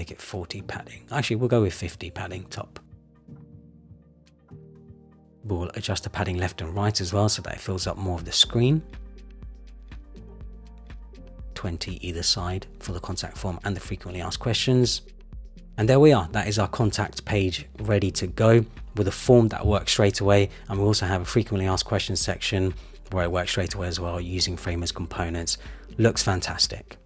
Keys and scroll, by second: 1.4 shift+Up, 7.4 Return, 9.2 Return, 12.5 Return, 14.3 Return, 19.9 super+-.